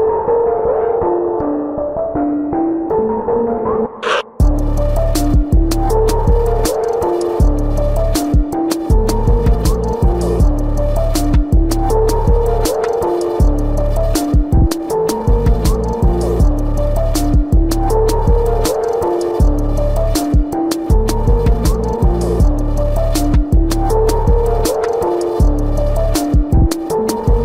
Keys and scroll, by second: 0.0 ctrl+=, 10.8 ctrl+alt+z, 11.8 ctrl+alt+z, 12.6 space, 16.3 space, 18.5 space, 19.8 space, 21.9 ctrl+-, 25.5 space.